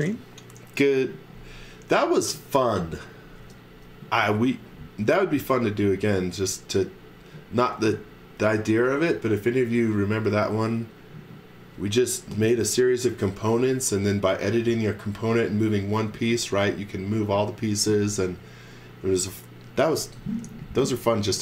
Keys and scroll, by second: 3.4 space, 4.0 z, 4.6 x, 5.0 space, 6.0 space.